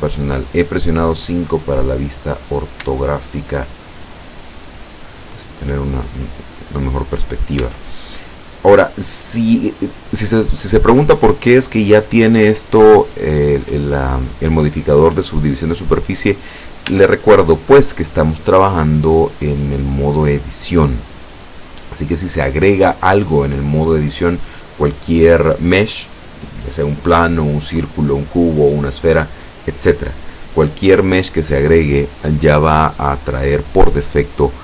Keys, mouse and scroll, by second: 1.5-2.3 scroll up 1, 2.5-2.9 scroll up 1, 2.9 shift+middle click, 4.1 shift+middle click, 4.6-5.8 shift+middle drag, 7.1 scroll down 1, 7.7 Tab, 8.2-8.9 scroll down 2, 9.2-9.8 scroll up 2, 9.9 scroll up 2, 10.4 right click, 11.9-12.3 scroll down 1, 16.5-16.9 scroll down 1, 17.0 Tab, 17.5-18.2 scroll up 1, 18.2-18.6 scroll down 1, 21.6-22.0 scroll up 1.